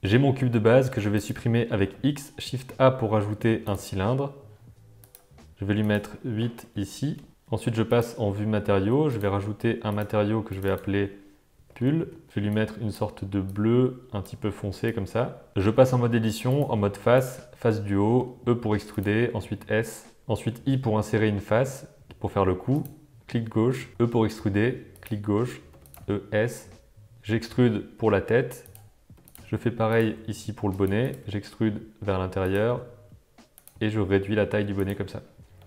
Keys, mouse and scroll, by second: 0.9 x, 1.8 shift+a, 5.0 click, 5.8-7.3 drag, 7.9 click, 9.1 click, 9.8 click, 10.4 click, 10.6-12.3 drag, 12.0 l, 12.6 click, 15.5 alt+a, 15.5 Tab, 15.6 Tab, 16.5 click, 17.1 click, 18.2 e, 19.1 s, 20.4 i, 23.9 e, 25.7 e, 25.9 s, 27.1 e, 29.1-31.1 typing, 32.6 e, 33.7 s.